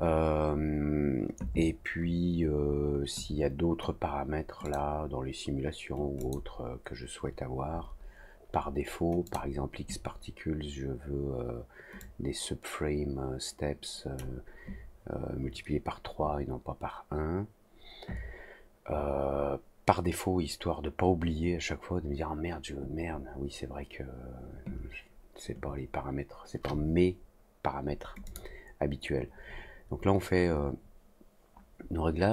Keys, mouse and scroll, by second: 4.6 click, 6.1 click, 9.2 click, 11.9 click, 28.2 click.